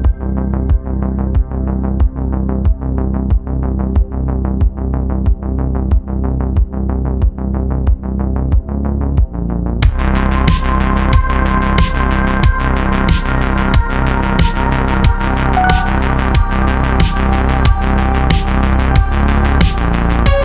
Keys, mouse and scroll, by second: 1.2-2.3 drag, 3.7 click, 4.6-5.0 scroll up 4, 5.0 g, 14.0-14.3 scroll down 7, 14.3-15.7 middle drag, 15.7 click, 16.1 shift+middle click, 17.0 scroll down 4, 17.2-20.3 middle drag.